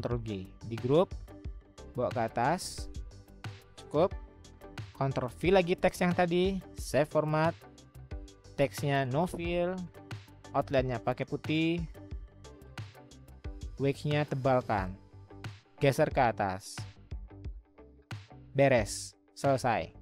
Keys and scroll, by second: 0.1 ctrl+g, 5.4 ctrl+v, 16.2-16.9 Up, 17.3 Up, 17.3-18.1 Down.